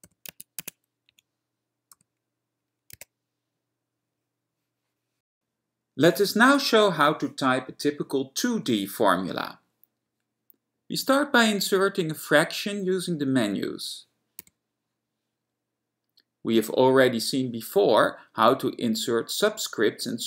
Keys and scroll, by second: 0.0 *, 0.4 i, 0.4 Tab, 0.7 Tab, 1.2 Right, 2.2 =, 3.2 1, 13.2 alt+f, 14.6 a.